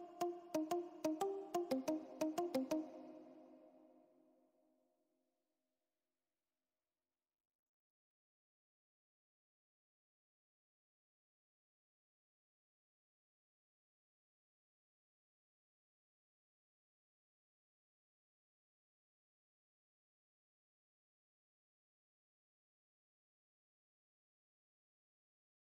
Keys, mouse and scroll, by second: 9.1-10.8 drag, 10.8 ctrl+=, 12.1-19.8 drag, 19.9 ctrl+0, 22.0 ctrl+0, 22.4 ctrl+-, 25.3-25.6 drag.